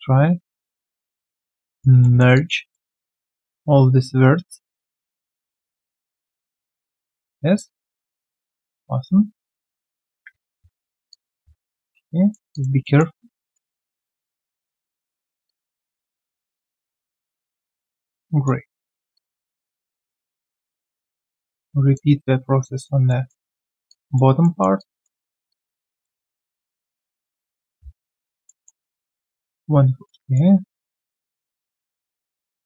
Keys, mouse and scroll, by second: 0.6 alt+click, 1.5 alt+right click, 1.7 alt+click, 2.0 alt+middle click, 2.3 alt+click, 2.6 alt+right click, 2.8 alt+click, 3.2 alt+middle click, 7.8 alt+click, 8.1 alt+middle click, 12.5 alt+click, 12.8 alt+middle click, 13.1 alt+right click, 13.4 alt+click, 17.3 alt+click, 18.2 alt+click, 18.7 alt+middle click, 19.1 alt+click, 23.1 alt+middle click, 23.9 alt+click, 24.4 alt+middle click, 24.8 alt+click, 28.4 alt+middle click, 28.6 ctrl+z.